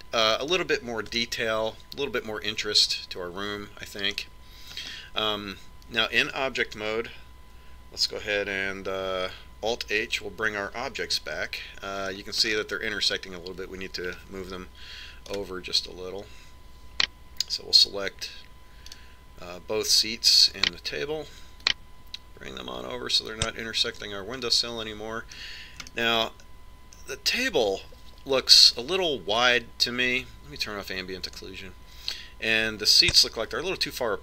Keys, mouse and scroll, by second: 2.8-4.6 middle drag, 6.4-8.4 middle drag, 10.8 alt+h, 12.7-17.5 middle drag, 17.2-18.9 right drag, 20.8-23.6 right drag, 23.4 click, 26.2-29.6 middle drag, 33.0 click.